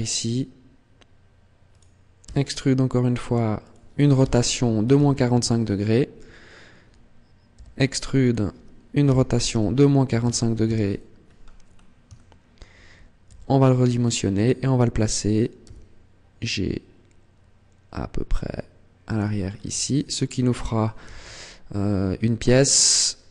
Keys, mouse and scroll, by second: 1.6 click, 2.0 e, 3.5 click, 4.1 r, 7.4 e, 8.1 click, 8.8 r, 11.0-12.0 scroll up 3, 12.0 shift+middle click, 13.1 s, 14.2 click, 15.5 g, 19.0 click, 19.2-19.6 scroll down 5, 19.6 Tab, 19.9 scroll down 1, 20.4-20.8 scroll up 2, 20.8 z, 22.3 Tab, 22.7-23.0 scroll down 2, 23.2 Tab.